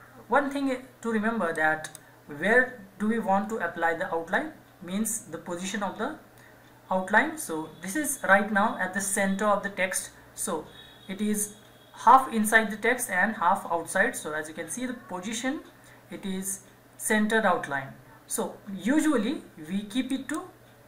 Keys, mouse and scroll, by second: 20.1 click.